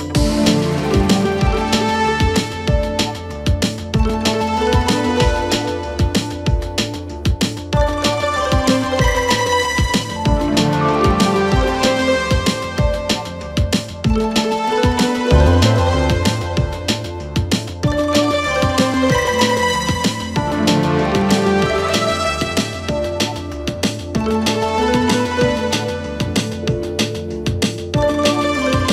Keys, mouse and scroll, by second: 0.7 g, 2.5 click, 2.8 g, 3.6 click, 3.9 g, 4.6-5.1 scroll down 3, 5.1 ctrl+KP_7, 6.2-6.9 shift+middle drag, 6.9-7.5 scroll up 2, 7.5 click, 8.3 g, 9.5 click, 9.8 g, 11.0 click, 11.2 g, 12.5 g, 13.6-13.9 scroll down 2, 14.0 KP_3, 15.1 scroll up 2, 15.4 Tab, 16.7 click, 17.3-18.4 scroll down 3, 18.4 click, 18.9-19.2 scroll down 3, 19.2 middle click, 19.6-20.3 scroll up 2, 20.3 KP_3, 20.9-22.0 scroll up 3, 22.0 Tab, 22.8 a, 23.0 3, 26.0 click, 26.7-27.7 scroll down 2, 27.7 shift+n, 28.8 Tab.